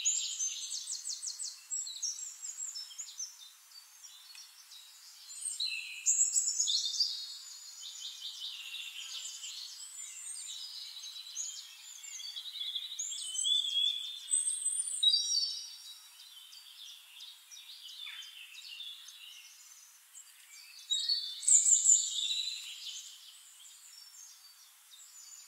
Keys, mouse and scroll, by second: 1.9 click, 4.9 ctrl+z, 5.9 ctrl+z, 6.9 ctrl+z, 7.8 ctrl+z, 9.0 click, 9.8 click, 11.5 ctrl+d, 12.0 ctrl+shift+d, 12.1-13.9 ctrl+shift+drag, 15.2 click, 16.7 click, 18.5 click, 20.0 ctrl+d, 20.8 ctrl+shift+click, 22.4 click.